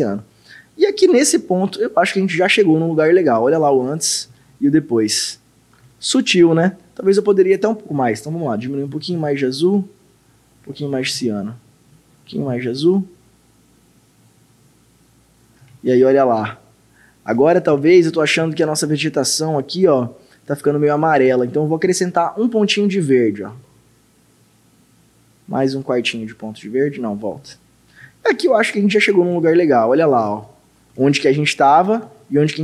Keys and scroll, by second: 3.4 ctrl+d, 4.4 ctrl+d, 4.4 ctrl+d, 5.9 ctrl+d, 6.4 ctrl+d, 8.9 ctrl+6, 9.2 ctrl+6, 11.1 ctrl+-, 12.3 ctrl+6, 12.5 ctrl+6, 15.7 ctrl+d, 17.4 ctrl+d, 17.8 ctrl+d, 23.6 ctrl+8, 26.0 ctrl+8, 29.3 ctrl+d, 30.3 ctrl+d, 32.1 ctrl+d.